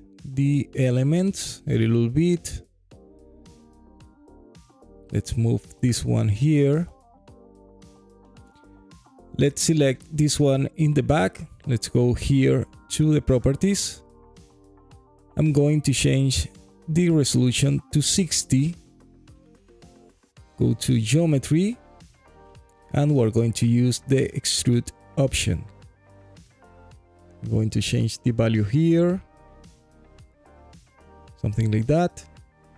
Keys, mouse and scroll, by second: 0.2 g, 0.4 y, 1.6 click, 2.7 click, 3.9 g, 4.1 y, 6.0 click, 6.5-7.9 alt+drag, 8.0 click, 8.4-8.9 scroll up 2, 9.0 alt+middle drag, 9.5 alt+click, 12.5 click, 14.5-16.9 drag, 19.5 click, 20.3 click, 27.1-28.9 shift+drag, 31.5 alt+click, 32.6 click.